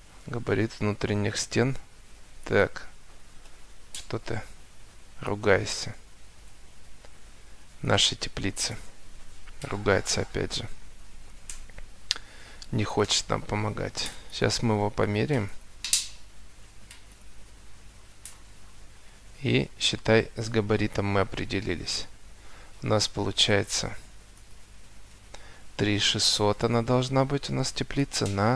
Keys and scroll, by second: 3.4 Delete, 8.4 Escape, 19.8 Escape, 22.7 Escape, 25.5 Escape.